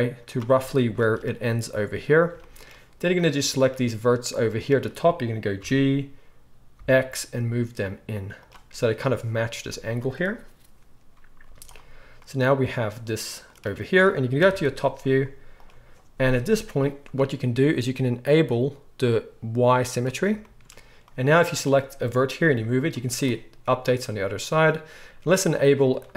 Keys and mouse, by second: 3.7-8.5 drag, 5.6 g, 8.5-21.1 middle drag, 11.4 z, 14.4 KP_7, 15.1 z, 21.1-25.9 drag, 22.4 g, 25.9-26.1 middle drag.